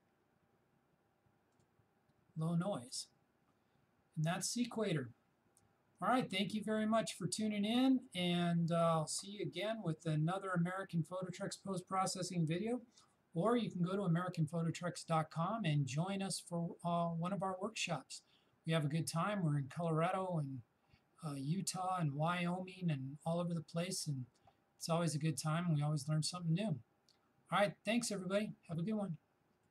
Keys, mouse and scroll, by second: 1.6 shift+click.